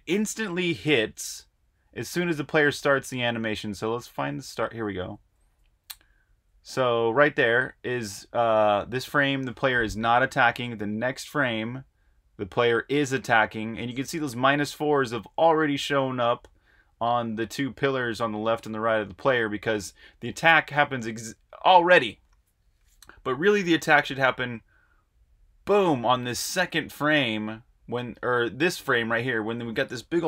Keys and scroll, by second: 0.2 Right, 0.3-6.8 typing, 8.6-9.4 typing, 10.9 Right, 12.8-13.5 typing, 24.7 Tab, 25.2 Tab, 28.1 Tab, 30.1-30.2 typing.